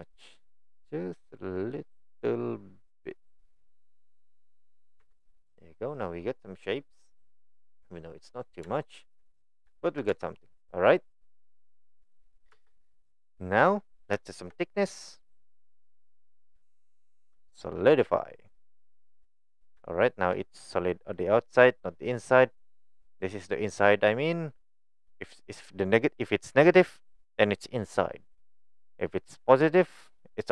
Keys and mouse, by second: 4.6 click, 5.1 Tab, 6.0-7.6 middle drag, 8.3 middle click, 8.8 shift+middle drag, 9.8 shift+middle click, 10.1 Tab, 12.2 click, 12.5 Tab, 12.8 click, 13.4-13.7 middle drag, 14.3 shift+middle click, 15.7 drag, 16.2-18.7 drag, 19.2-19.6 middle drag, 19.9-20.2 shift+middle drag, 23.0 click, 29.1 click, 29.4 click.